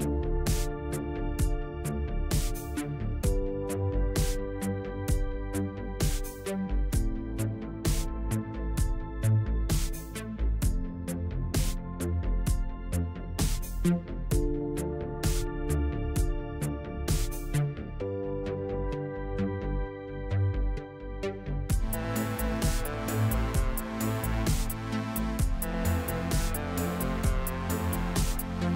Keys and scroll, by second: 4.0 s, 8.2 Tab, 9.9 Tab, 19.5 KP_7, 23.3 a, 24.0 a, 24.6 i, 24.9 u.